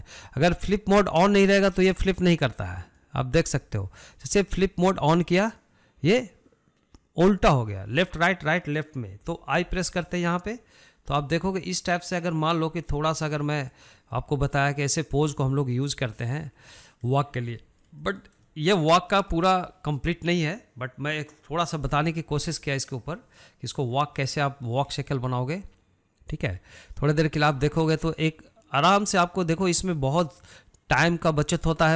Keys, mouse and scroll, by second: 1.5 click, 2.4 click, 3.8 click, 5.0 click, 6.4 click, 12.3-16.4 drag, 16.4-17.5 middle drag, 17.5-17.9 scroll down 4, 17.9-18.3 middle drag, 18.3-18.7 scroll up 4, 18.7-23.2 shift+middle drag, 25.0 scroll up 1, 25.6-27.9 shift+middle drag, 27.9 click, 28.4 scroll down 2, 28.7-31.9 middle drag.